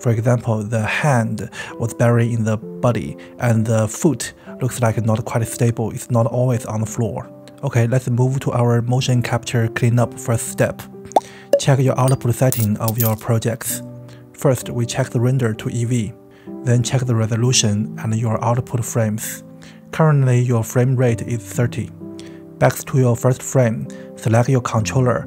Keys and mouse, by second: 5.6 space, 9.7 space, 12.3 space.